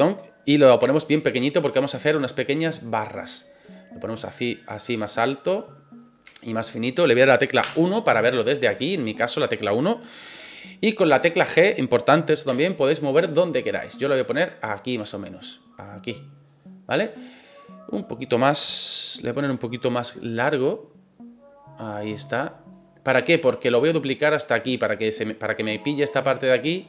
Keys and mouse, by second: 0.8 s, 2.3 click, 3.3 click, 4.2-5.5 drag, 6.2 s, 6.9 click, 7.6 KP_1, 8.9-9.4 shift+middle drag, 12.4 g, 16.4 click, 20.7-22.7 drag.